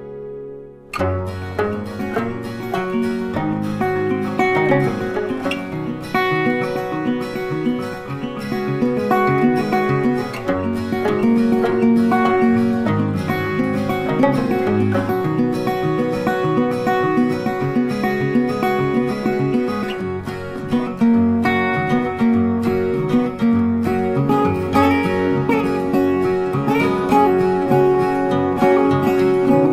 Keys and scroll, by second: 5.3 ctrl+t, 23.2 ctrl+t.